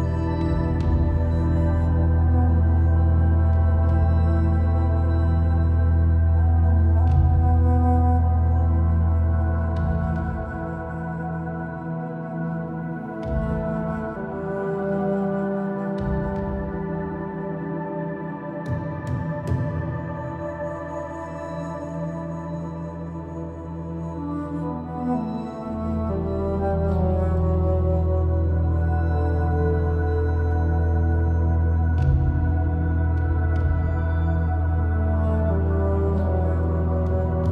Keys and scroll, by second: 9.7 super+s, 20.4-20.8 typing, 28.8 super+t, 31.7 Return.